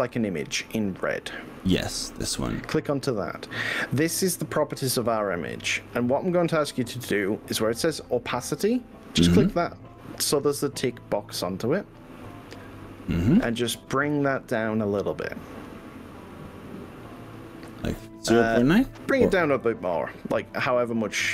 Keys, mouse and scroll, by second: 2.1 click, 5.0 click, 12.3 click, 15.1-17.1 drag, 19.7 click.